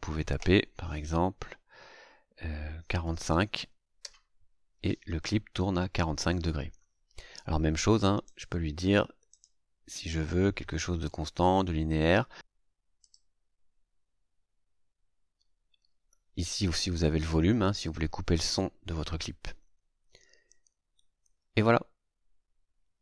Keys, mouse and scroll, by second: 3.0 KP_4, 3.2 KP_5, 3.9 KP_Enter, 8.2 right click, 9.2 right click, 13.0 click, 14.0 scroll down 2, 14.7-15.1 scroll down 2, 15.1-22.5 scroll up 2.